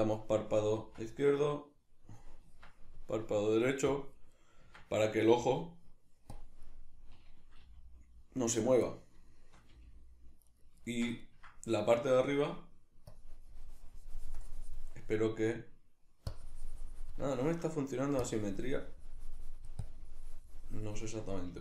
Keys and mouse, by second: 0.8 Tab, 1.5 right click, 2.5 Tab, 3.9 click, 4.7 Tab, 8.7 right click, 8.9-10.6 middle drag, 9.7 g, 10.6 right click, 10.9-13.1 shift+middle drag, 13.1-15.4 drag, 15.4 right click, 16.3-17.3 drag, 17.3 shift+middle click, 18.3-21.6 drag, 21.5 f.